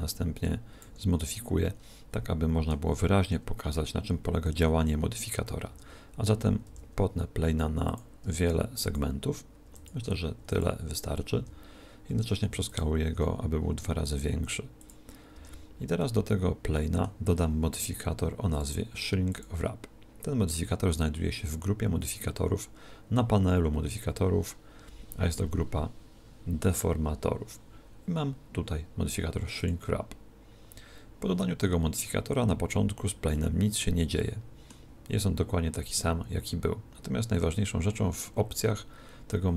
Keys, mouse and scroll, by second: 1.2-3.1 middle drag, 5.7 Tab, 6.7 w, 8.3 w, 8.8 w, 9.7 w, 10.4 w, 11.4 Tab, 12.2 s, 12.8 click, 13.2 Tab, 14.4 w, 15.4 Tab, 16.1-18.5 middle drag, 18.5-21.1 drag, 33.4-36.1 middle drag.